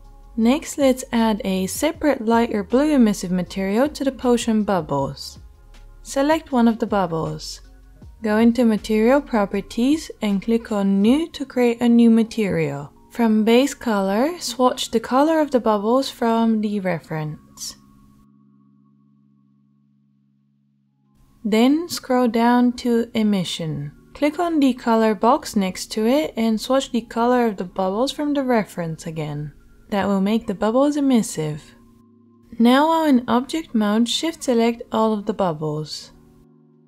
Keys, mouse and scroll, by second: 10.4-11.5 middle drag, 11.5 click, 11.6-17.8 middle drag, 12.3 shift+s, 17.8-31.5 right drag, 31.5 middle click, 31.6-32.9 right drag, 32.9 shift+middle click, 33.0-34.1 shift+right drag, 34.1 shift+middle click, 34.5-35.5 shift+right drag, 35.5 shift+middle click, 35.6 shift+right click, 36.4 shift+middle click, 36.4 shift+right click.